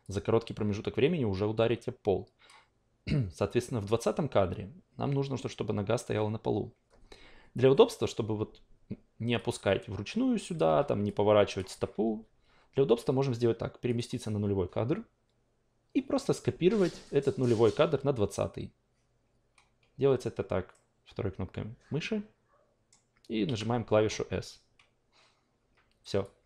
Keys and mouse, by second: 0.0-2.5 drag, 9.8 click, 10.7 e, 11.0-12.0 drag, 12.0 ctrl+z, 13.8 click, 20.7 middle click, 21.0-22.9 middle drag, 23.4 s, 26.2-26.4 drag.